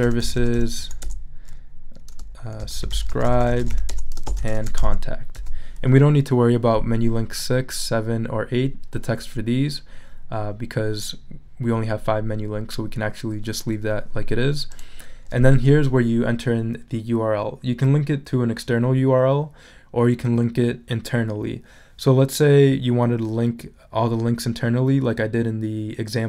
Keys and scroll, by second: 0.0-1.3 typing, 2.3-5.8 typing.